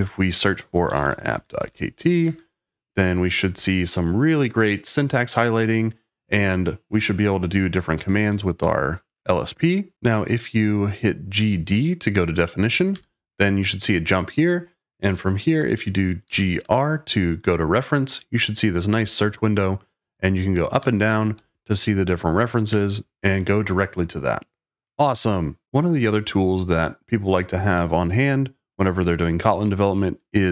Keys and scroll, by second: 0.0-2.1 typing, 2.2 Return, 3.4 j, 3.5 j, 7.9-8.5 typing, 9.9 j, 12.4-13.3 typing, 16.2 g, 16.5 r, 19.1 Up, 20.7 Down, 21.3 Page_Up, 22.6 Return.